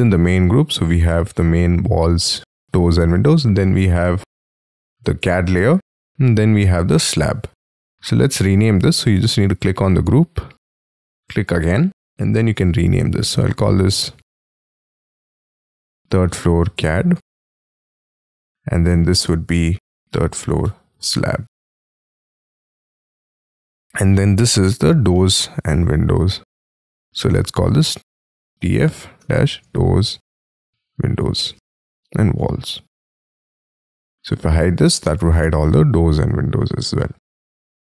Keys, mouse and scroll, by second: 13.4 t, 15.4-17.6 typing, 18.6 double click, 19.7-22.2 typing, 25.1 middle click, 27.8-33.1 typing.